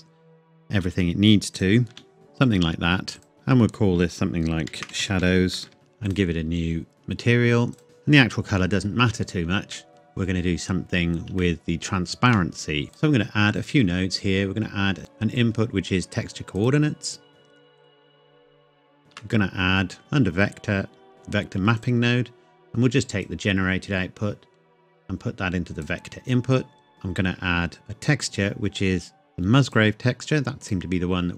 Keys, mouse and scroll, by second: 0.8 s, 1.6 click, 1.9 g, 2.1 s, 3.2 click, 4.7-5.6 typing, 6.1 click, 7.8 shift+middle click, 9.7 shift+middle click, 9.9-10.8 scroll up 1, 10.8-11.3 scroll down 1, 11.4 shift+middle click, 12.7 scroll up 1, 12.9 click, 16.6 click, 17.8 click, 19.0 shift+a, 20.0 click, 21.1 click, 26.9 shift+Caps_Lock, 29.7 click.